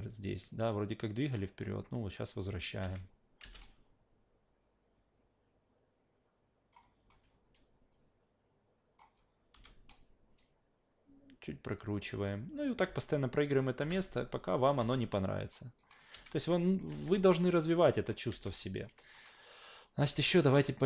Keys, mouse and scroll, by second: 0.6 click, 2.3 click, 2.8 alt+v, 3.4 alt+v, 3.6 click, 7.9 click, 9.5 e, 10.4 click, 12.7 click, 12.8 alt+v, 13.8 alt+v, 13.9 click, 14.2 alt+right click, 14.4 alt+click, 14.8 alt+v, 15.4 alt+drag, 15.6 alt+right click, 15.8 alt+middle drag, 16.1 alt+v, 16.7 click, 16.9 alt+v, 17.6 alt+right click, 17.8 alt+drag, 18.3 alt+v, 18.7 click, 19.0 alt+right click, 19.2 alt+middle click, 19.5-19.8 alt+drag, 20.0 alt+v, 20.4 alt+click.